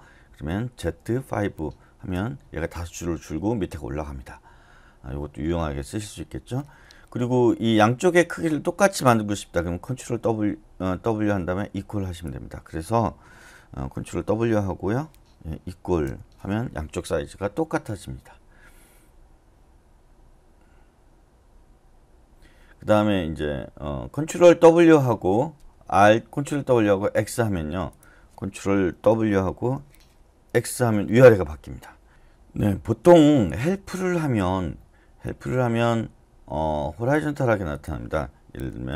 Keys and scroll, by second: 0.8-1.3 typing, 2.1 Return, 14.8 ctrl+w, 16.0 =, 29.6 ctrl+w, 30.5 x.